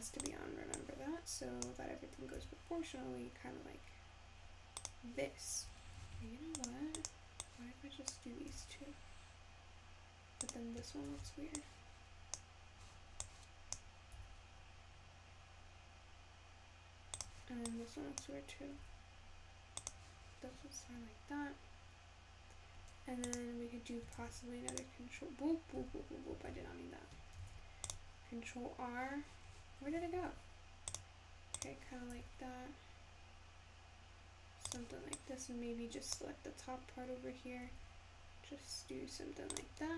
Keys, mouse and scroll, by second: 0.2 click, 0.8 click, 2.4 s, 6.2 ctrl+z, 6.6 click, 7.0 click, 7.5 click, 8.5 s, 11.1 ctrl+z, 11.6 click, 13.2 click, 14.2 s, 17.7 click, 18.9 s, 23.2 click, 24.2 ctrl+r, 26.6 ctrl+z, 27.4 ctrl+r, 30.2 ctrl+r, 32.2 s, 35.2 click, 37.7 s.